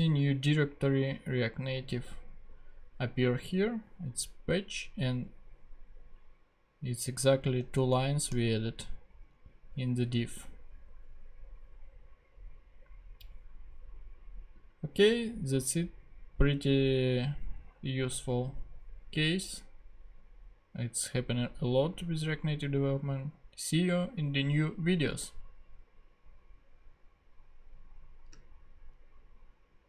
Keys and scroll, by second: 7.3 super+Left, 7.7 shift+super+Down.